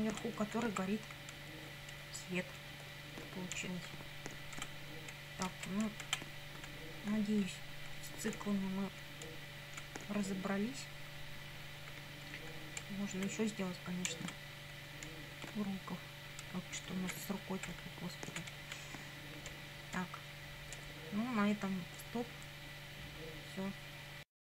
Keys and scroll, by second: 0.4 Up, 0.7 Right, 1.0 Left, 1.4 Right, 2.0 Left, 2.7 Up, 3.6 Down, 4.6 Right, 5.8 Down, 6.4 Up, 7.4 Right, 8.0 Up, 8.4 Left, 9.8 Up, 10.5 Left, 11.2 Right, 12.3 Up, 12.9 Left, 14.1 Down, 15.1 Up, 16.5 Right, 16.9 Up, 17.3 Right, 17.8 Down, 18.6 Right, 18.7 Up, 19.5 Down.